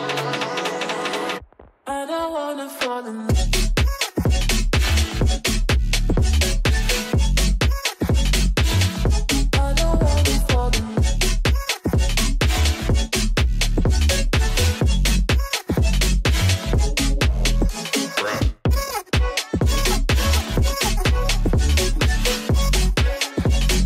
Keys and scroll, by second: 4.1 space, 7.0 ctrl+r, 12.2 ctrl+r, 13.3 F4, 13.6 Escape, 16.6 F2, 23.7 ctrl+r.